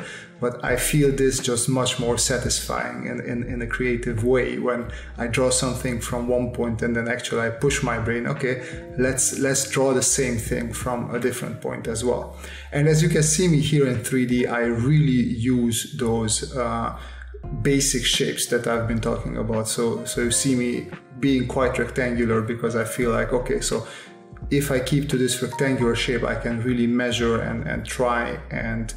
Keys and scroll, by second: 1.9 space, 4.1 space, 5.5 space, 7.7 space, 10.7 space, 13.9 space, 14.9 space, 16.4 space, 18.3 space, 21.6 space, 23.4 space, 25.2 space, 26.7 space, 28.0 space.